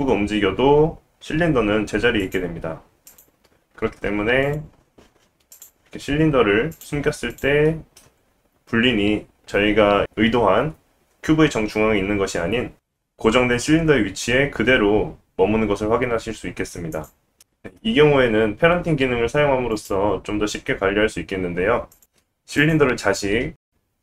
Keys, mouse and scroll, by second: 2.6 s, 3.7 g, 5.5 click, 6.7 click, 7.3 click, 7.6-11.7 middle drag, 11.8 g, 18.8 click, 21.0 click, 22.5 click, 23.7 shift+click.